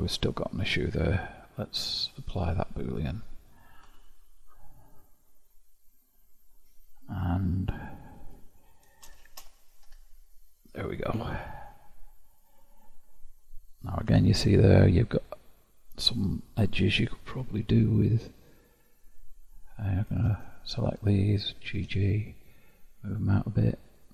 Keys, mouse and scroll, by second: 1.9-3.8 drag, 3.8 Tab, 9.0 shift+', 9.8 Tab, 10.9-11.7 scroll up 4, 11.7-12.5 scroll up 1, 12.5-13.7 scroll up 1, 13.7 scroll up 1, 14.1 Tab, 15.1-17.3 middle drag, 17.3 2, 18.6 click, 20.5 ctrl+click, 21.6 g, 23.8 click.